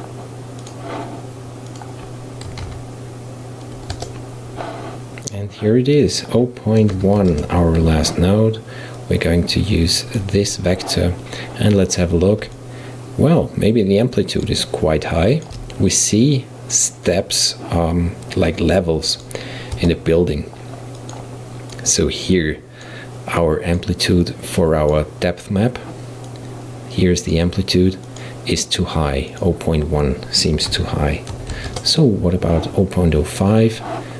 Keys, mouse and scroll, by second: 1.7-4.8 drag, 5.3 click, 6.2-9.3 drag, 12.6-17.7 middle drag, 19.1 click, 19.8 Tab, 21.0 click, 21.8-23.5 drag, 24.3 click, 26.3 click, 28.1 click, 29.4-32.4 drag.